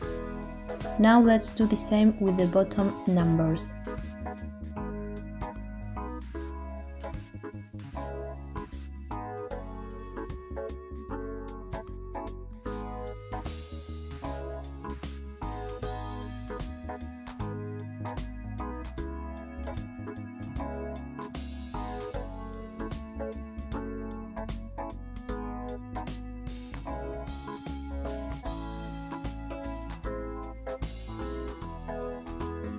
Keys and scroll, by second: 11.2 a, 14.8 Tab, 24.3 ctrl+j, 26.4 ctrl+j, 29.0 ctrl+j.